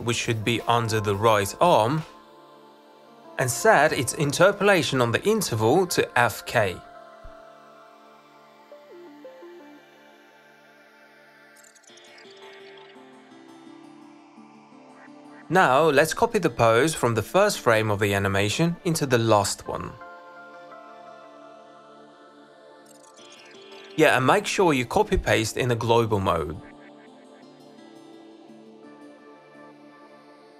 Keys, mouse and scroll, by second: 4.8 click, 9.1-11.0 drag, 13.6-15.0 drag, 17.1 ctrl+c, 17.6 click, 18.1 ctrl+v, 18.4 ctrl+v, 18.5 ctrl+v, 23.1 click, 23.4 click, 23.9 click, 24.4 click, 25.1 ctrl+c, 25.9 click, 26.5 ctrl+v.